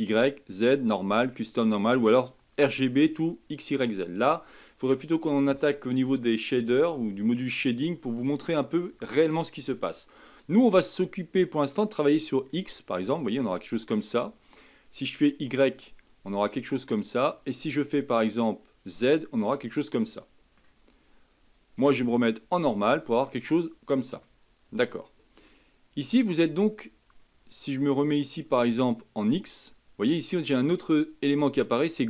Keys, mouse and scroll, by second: 11.6-13.3 drag, 13.3-13.7 scroll down 2, 13.7-14.8 scroll up 2, 14.8-16.2 drag, 16.2 scroll down 2, 17.6-19.4 drag, 19.4-21.4 middle drag, 21.4-23.2 drag, 23.2-26.2 middle drag, 27.6-30.6 drag, 31.9-32.0 drag.